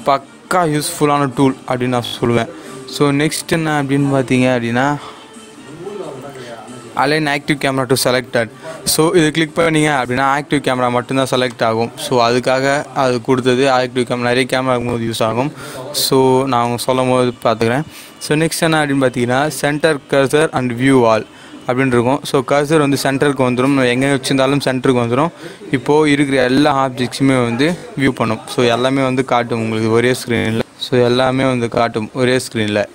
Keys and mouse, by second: 0.9-3.4 drag, 8.9 click, 11.4-16.6 drag, 21.0 click, 30.4 click.